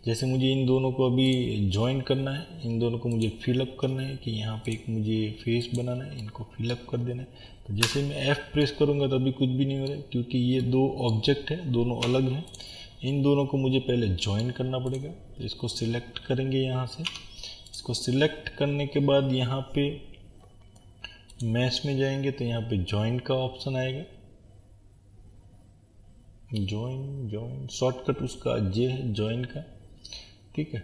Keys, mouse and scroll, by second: 1.3 click, 6.2-12.5 middle drag, 10.1-10.6 scroll down 1, 12.1 Tab, 12.5 click, 13.1-14.9 middle drag, 14.9 click, 17.1 Tab, 17.7 click.